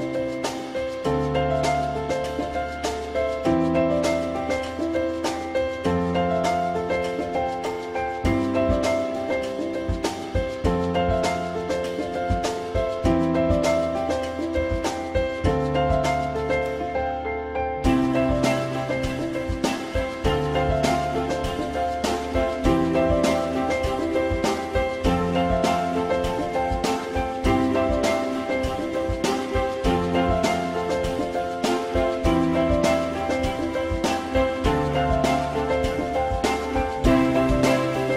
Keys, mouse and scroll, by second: 3.9 ctrl+z, 11.9 ctrl+z, 34.1 alt+middle click, 36.5 alt+middle click.